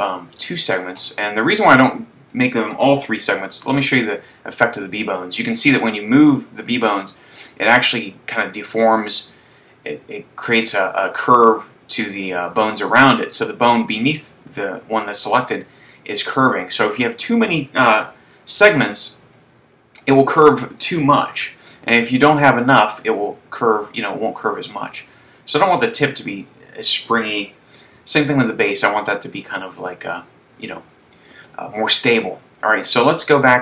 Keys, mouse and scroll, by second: 1.8 right click, 3.7 r, 17.7 click, 18.4 super+z, 20.0 right click, 21.7 r, 27.3 click, 27.9 super+z, 33.2 click.